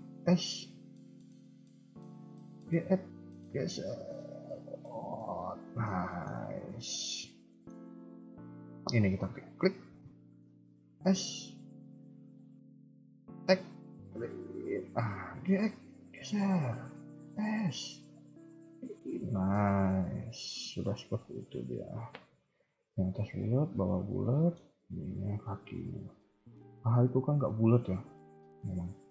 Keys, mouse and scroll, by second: 0.1 s, 2.6 g, 5.8 scroll down 1, 6.0 shift+middle click, 6.3-7.4 shift+scroll up 2, 7.5 shift+middle click, 9.4 alt+click, 10.9 s, 15.2 g, 17.1 s, 19.0 KP_3, 19.3 scroll down 2, 19.5 middle click, 24.7 scroll up 2, 24.9 KP_3, 25.3 KP_1, 25.6 KP_3, 26.4 scroll up 2, 26.6 KP_1, 27.7 KP_3, 28.4 KP_1.